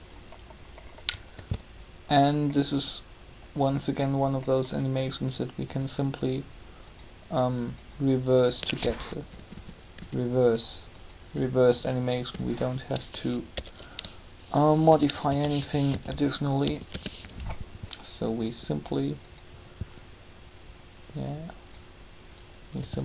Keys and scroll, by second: 1.3 alt+a, 8.9 BackSpace, 15.2-16.6 typing, 16.9 Return, 22.6-23.0 typing.